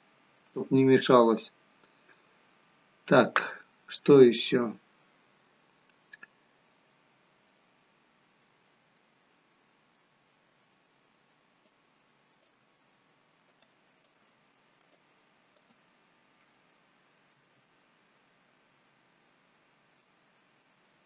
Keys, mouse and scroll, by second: 9.9 shift+middle click, 11.7 shift+click, 13.5 ctrl+click, 14.8 alt+shift+click, 17.2 r, 18.6 r.